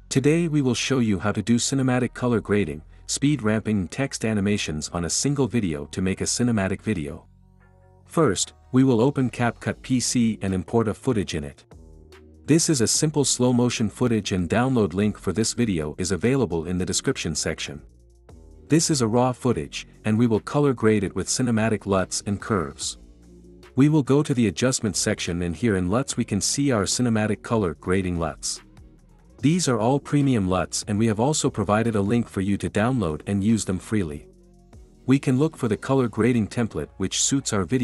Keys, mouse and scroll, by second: 0.0 right click, 0.6-1.6 drag, 4.7-5.7 drag, 8.9-9.9 drag, 13.2 space, 14.4-15.5 drag, 15.5 space, 19.4 space, 20.3-21.3 drag, 24.5-25.5 drag, 27.1-28.2 drag.